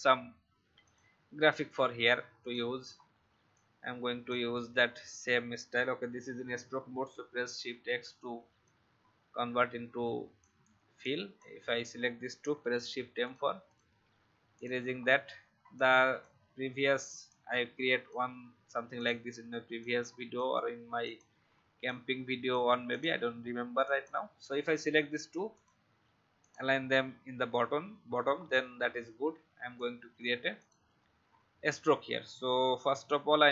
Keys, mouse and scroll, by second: 2.9-3.4 alt+scroll up 1, 3.5 shift+click, 7.3 shift+x, 7.8 shift+v, 8.6-10.4 alt+drag, 11.0 click, 12.5 shift+m, 13.2 alt+click, 14.1 alt+v, 14.5 click, 14.9 alt+scroll up 1, 15.7-18.9 drag, 19.8 shift+click, 21.0 click, 21.8 shift+click, 22.9 click, 28.1 alt+scroll down 1, 29.7 click, 32.8 v, 33.3 click.